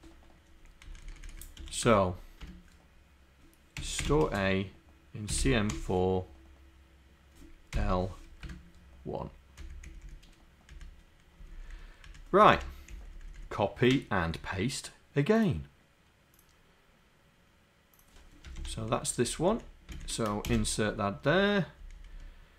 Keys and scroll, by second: 20.3 Up.